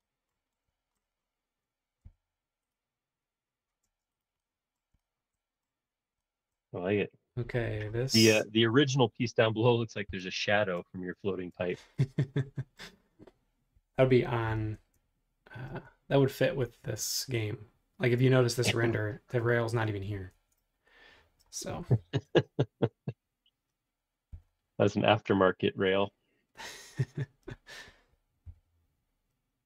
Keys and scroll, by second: 2.0 b, 10.1 l, 11.6 space, 14.8 super+Tab, 20.3 super+Tab, 21.8 l, 24.3 c.